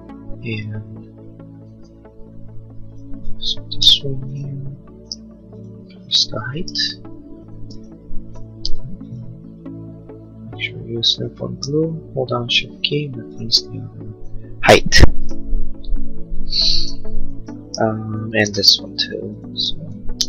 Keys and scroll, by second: 2.0 space, 4.0 m, 7.7 space, 18.6 space.